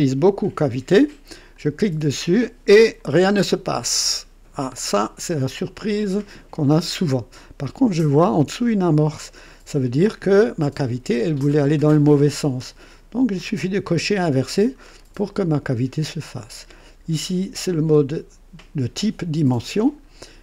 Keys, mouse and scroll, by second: 1.5 click, 2.8-5.3 drag, 6.7-7.8 drag, 13.5 click, 14.8-16.2 drag, 19.9 scroll down 2.